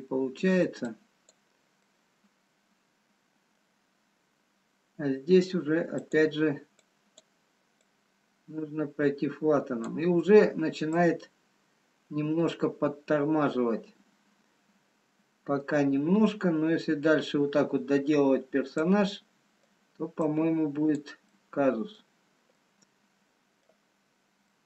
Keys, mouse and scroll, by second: 1.9 click, 1.9 middle click, 6.7 click, 7.5 click, 11.0 click, 11.0 scroll down 2, 19.7 middle click, 20.4 click, 21.8 middle click, 22.6 middle click, 22.6-23.0 scroll down 4, 24.2 scroll up 3.